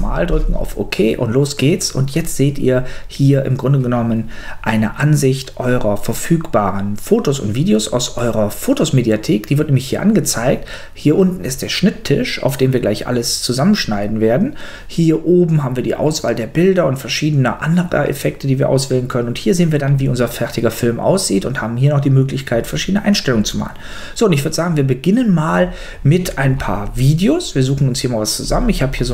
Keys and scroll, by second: 0.7 Return.